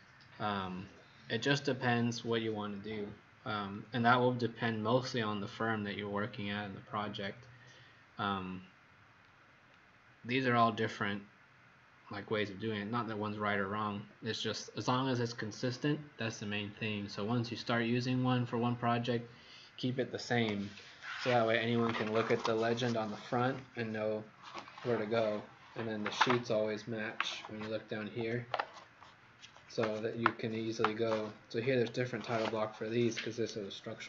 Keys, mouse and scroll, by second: 0.8-1.2 scroll down 1, 1.3-1.8 scroll down 2, 3.7 scroll down 2, 9.3-10.0 scroll down 4.